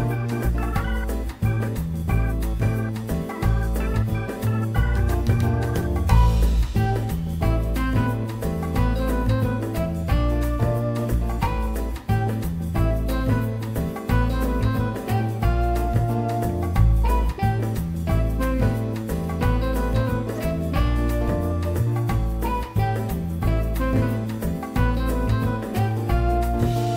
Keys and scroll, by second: 0.7 ctrl+alt+e, 1.7 2, 5.7 ctrl+z, 6.1 F4, 15.0 F4, 18.6 F4, 20.2-21.1 typing, 26.6 F3.